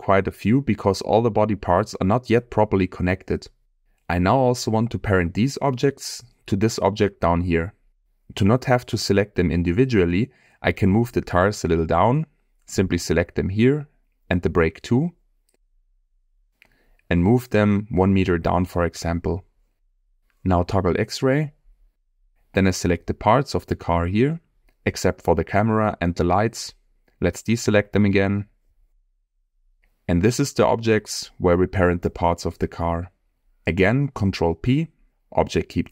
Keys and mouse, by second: 0.8 click, 3.0-3.3 middle drag, 3.5-3.9 middle drag, 4.1 click, 5.1-5.6 middle drag, 6.3-6.6 shift+middle drag, 6.9 middle click, 8.8 click, 9.6 shift+click, 10.4 shift+click, 11.6-12.5 middle drag, 13.6 shift+click, 14.0 shift+middle click, 15.1 middle click, 16.0 shift+click, 16.4 shift+middle click, 18.7 g, 18.9 z, 19.3 -, 19.4 1, 19.6 Return, 21.3-21.9 drag, 22.1-22.5 shift+middle drag, 23.3-25.9 drag, 26.8 shift+click, 26.9 shift+click, 27.6 shift+click, 28.5 shift+click, 29.6-30.5 middle drag, 31.8-32.1 middle drag, 32.5 shift+click, 34.4 ctrl+p.